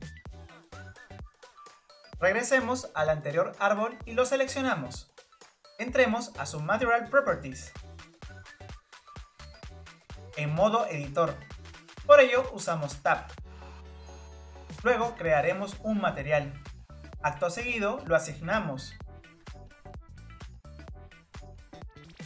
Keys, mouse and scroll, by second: 0.3 click, 0.7 click, 1.0 click, 1.6 click, 2.1 click, 3.4 click, 3.8 scroll up 2, 4.6-6.2 shift+middle drag, 6.2 click, 10.2 click, 11.6 Tab, 14.6 Tab, 14.9-17.8 drag, 17.8-19.4 scroll down 3, 19.4-20.9 drag, 20.9-22.0 middle drag.